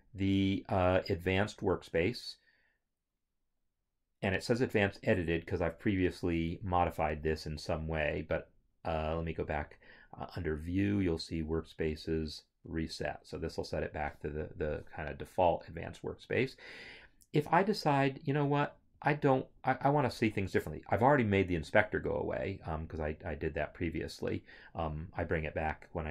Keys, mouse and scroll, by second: 1.6 click, 9.3 click, 13.0 click, 22.8 click.